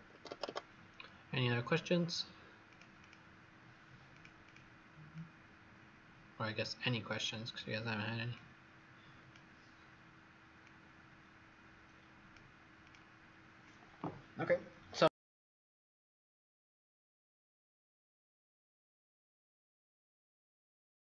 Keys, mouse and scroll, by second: 0.2 Escape, 0.4 Escape, 2.6 click, 2.9 click, 4.0 click, 4.4 click, 5.1 click.